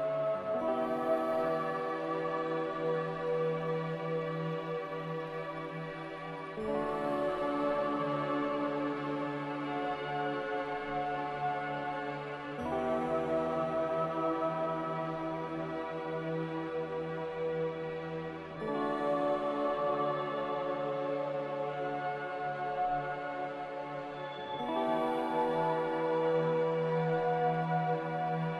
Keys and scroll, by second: 3.2 q.